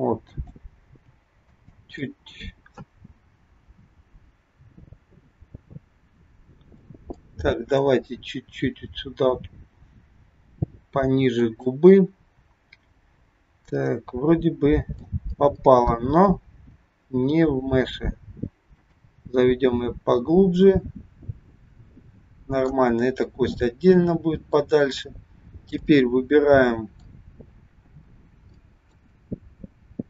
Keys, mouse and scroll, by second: 0.8 g, 1.9 scroll up 1, 2.0 middle click, 7.3 middle click, 8.7 g, 11.9 middle click, 16.4 g, 19.2 middle click, 23.5 middle click, 25.8 middle click, 28.0-28.6 scroll up 3, 28.6 shift+middle click, 29.2 middle click.